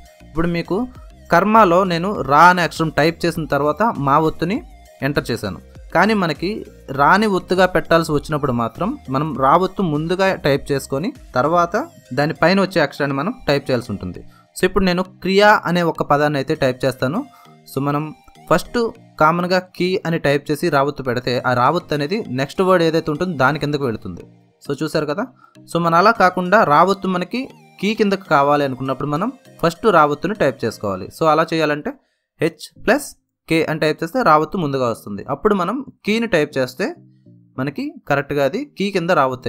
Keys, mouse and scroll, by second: 17.8-18.2 typing, 22.0-23.0 typing, 25.2 typing, 27.1-27.8 typing, 30.8 h, 33.5 j, 34.5 r, 37.2 n, 39.0 space.